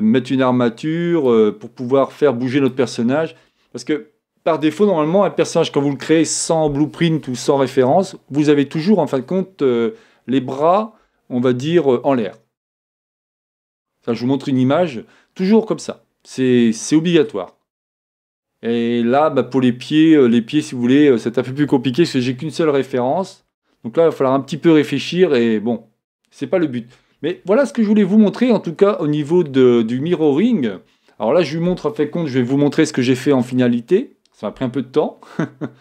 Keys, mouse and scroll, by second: 1.4-3.2 drag, 3.1-5.0 middle drag, 19.1-20.9 middle drag, 26.3 middle click, 26.5-27.7 scroll down 1, 27.7-29.5 middle drag.